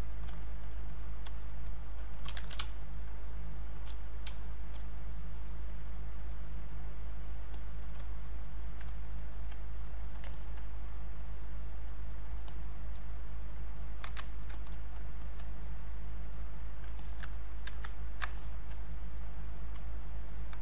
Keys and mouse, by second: 0.4 shift+click, 0.9-2.3 drag, 2.0-3.1 typing, 3.0 click, 4.6-10.0 drag, 10.3 alt+click, 14.3 ctrl+right click, 14.5 ctrl+click, 16.2 click, 17.0 click, 17.0 alt+click, 17.3 ctrl+right click, 17.9 ctrl+right click, 18.4 alt+click, 20.1 click.